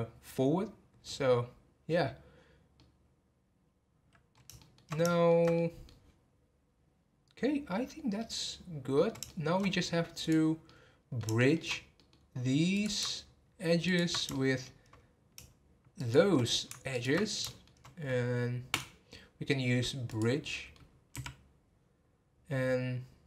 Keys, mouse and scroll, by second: 2.8-10.2 middle drag, 10.2 click, 10.6-11.6 middle drag, 11.6 scroll up 1, 11.9 middle click, 12.7 click, 13.8 ctrl+click, 14.3-15.9 shift+middle drag, 15.9 shift+click, 16.9 ctrl+click, 17.2 scroll down 1, 17.4-18.7 shift+middle drag, 18.7-20.5 right drag, 20.5 middle click, 21.1 x.